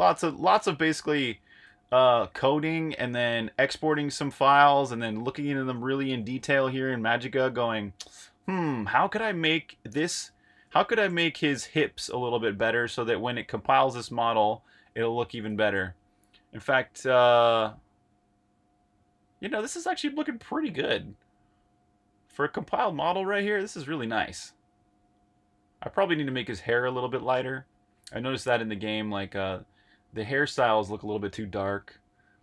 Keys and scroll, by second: 15.4 super+z.